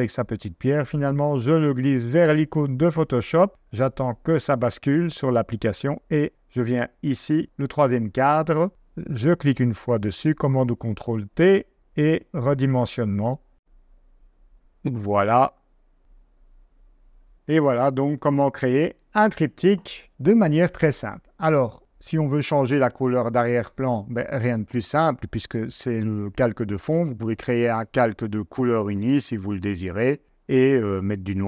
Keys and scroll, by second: 8.7 super+t, 10.3 super+t, 17.3 v.